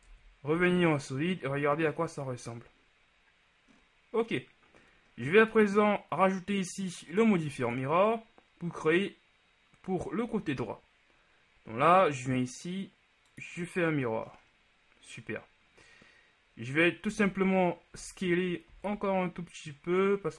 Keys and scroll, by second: 0.2 Tab, 0.6 a, 17.2 z, 18.0 Tab, 18.8 s.